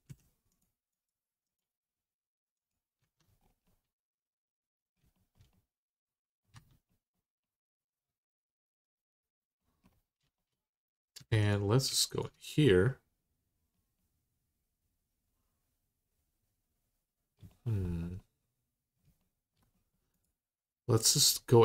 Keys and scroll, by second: 2.8 Tab, 6.3 Tab, 11.0 3.